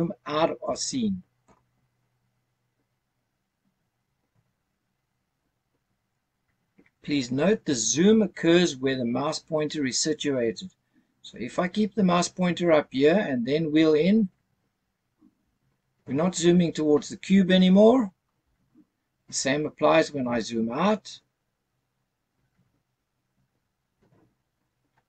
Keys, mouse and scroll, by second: 2.7-3.7 scroll up 3, 4.5-6.6 scroll down 4, 14.4-15.1 scroll up 1, 15.1-15.7 scroll up 1, 15.7-17.5 scroll up 1, 18.3-20.0 scroll down 3, 21.1 scroll down 1, 23.0-25.0 scroll up 4.